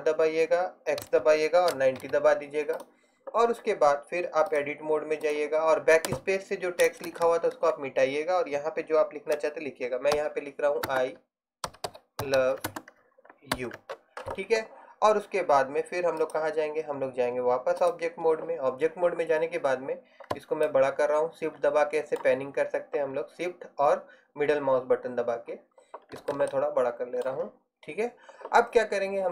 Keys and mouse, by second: 6.9 BackSpace, 7.1 BackSpace, 7.3 BackSpace, 7.6 BackSpace, 10.2-13.6 typing.